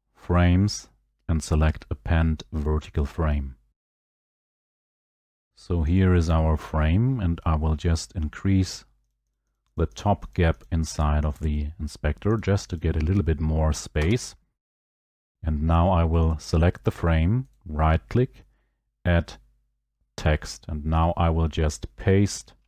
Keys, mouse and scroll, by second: 5.8 click, 6.0 click, 9.1 click, 9.3 click, 9.6 click, 9.8 click, 10.4 click, 10.7 click, 11.0 click, 11.3 click, 12.4 click, 12.8 click, 13.9 Return, 14.8 click, 16.3 click, 17.6 right click, 20.3 click.